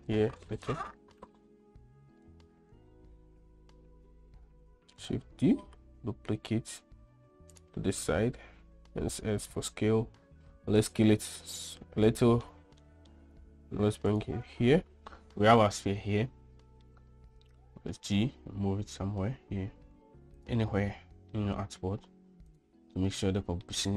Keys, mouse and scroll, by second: 5.3 shift+d, 9.1 s, 11.8-12.8 middle drag, 13.3 scroll up 1, 13.3 middle drag, 13.7 g, 15.7-16.8 middle drag, 17.1 g, 20.6-21.3 middle drag, 21.4 g, 23.0-23.6 middle drag, 23.8 g.